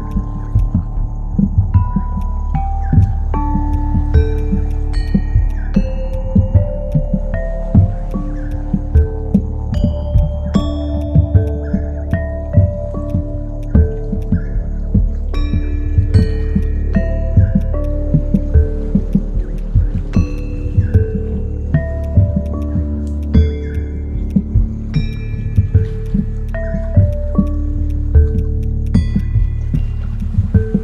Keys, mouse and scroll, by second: 0.0 ctrl+z, 0.1 ctrl+click, 4.9 shift+click, 9.3 shift+click, 10.1 shift+click, 10.2 shift+click, 22.4 right click, 25.1 ctrl+click, 27.4 shift+click, 28.3 shift+click.